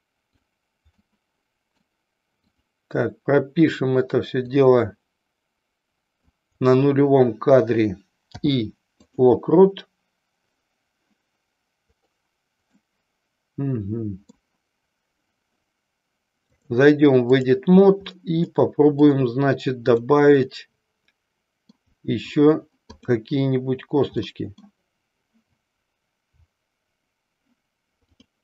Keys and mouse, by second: 0.9 middle click, 2.4 click, 4.5-6.3 drag, 12.8-14.5 middle drag, 16.5-17.5 drag, 18.5 middle click, 20.0 click, 24.3 middle click, 28.0 click.